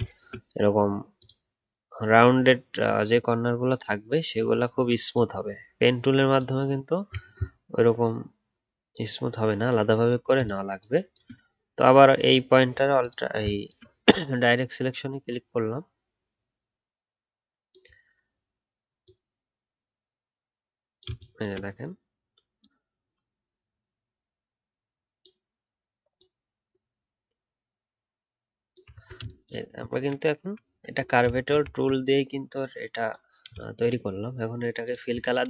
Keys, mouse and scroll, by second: 28.9 alt+scroll down 1, 30.6-31.4 alt+scroll down 1, 31.6-34.0 alt+scroll down 1.